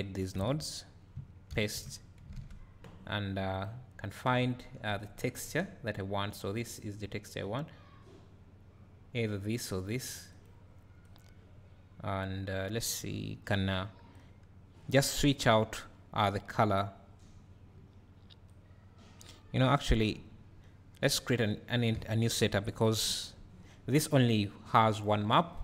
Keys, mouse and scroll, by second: 0.4 x, 1.5 ctrl+v, 16.6 click, 18.5-19.6 drag.